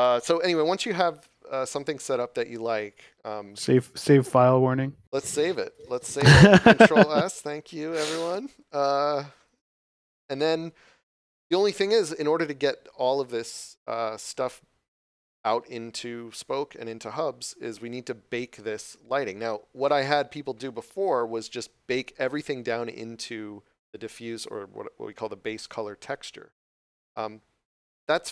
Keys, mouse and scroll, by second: 1.7 right click.